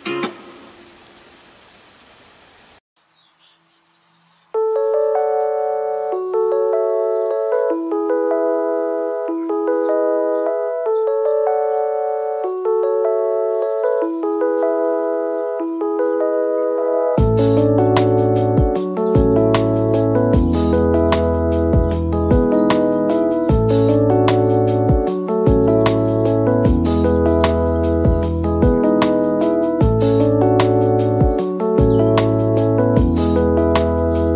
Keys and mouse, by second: 0.1 middle click, 0.6-5.6 typing, 0.7 shift+middle click, 1.5 Tab, 1.5 middle click, 1.7 right click, 1.9 right click, 3.1 click, 3.4 middle click, 3.7 Tab, 3.8 shift+middle click, 4.0 Tab, 4.8 click, 4.9 middle click, 5.1 Tab, 5.3 Tab, 6.3 click, 6.5 middle click, 6.7 KP_1, 6.9 click, 7.3 click, 8.3 click, 8.8 click, 9.7 click, 10.1 shift+click, 10.5 Tab, 10.6 Tab, 11.0 g, 11.3 Tab, 11.4 g, 11.9 click, 12.7 Tab, 12.7 e, 14.5 a, 14.8 g, 16.0 e, 16.3 ctrl+z, 17.2 e, 17.9 shift+click, 18.1 click, 18.6 middle click, 18.8 click, 19.3 middle click, 19.4 click, 19.7-22.2 typing, 19.9 middle click, 20.6 ctrl+e, 20.8 ctrl+r, 22.2 click, 22.5 ctrl+r, 22.5 Tab, 22.8 Tab, 22.8 ctrl+a, 23.2 click, 23.2 middle click, 23.5 shift+click, 24.2 middle click, 24.4-27.7 typing, 24.5 middle click, 25.0 middle click, 27.0 click, 27.1 shift+middle click, 27.7 click, 28.1 ctrl+r, 28.2 Tab, 28.4 click, 28.7 click, 29.0 middle click, 29.1 Tab, 29.3 g, 29.4 click, 29.7 ctrl+r, 30.0 g, 30.6 click, 30.6 KP_1, 30.7 Tab, 30.7 click, 31.3 click, 33.9 click, 34.1 middle click.